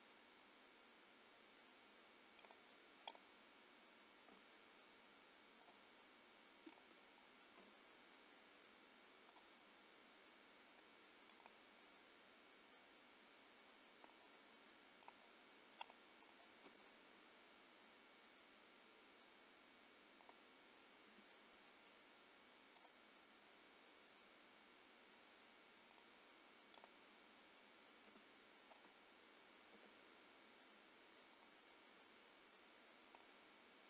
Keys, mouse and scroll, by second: 2.5 click, 3.1 click, 4.4 g, 6.8 click, 7.7 g, 9.6 middle click, 11.5 click, 11.7 middle click, 14.1 click, 15.1 click, 15.9 click, 16.2 click, 16.8 g, 21.4 r, 23.4 middle click, 26.0 middle click, 26.0 click, 26.8 click, 28.2 g, 29.1 middle click, 29.8 g, 31.6 middle click, 33.3 click, 33.5 middle click.